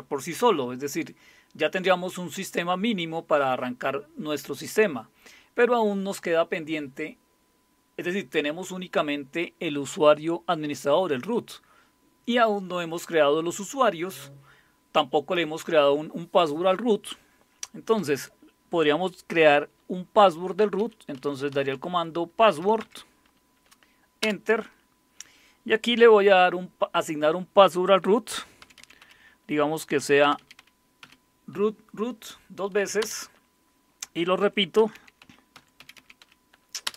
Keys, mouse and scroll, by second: 20.8-22.5 typing, 22.8 Tab, 24.2 Return, 28.1-31.0 typing, 33.0 Return, 34.2-36.9 typing.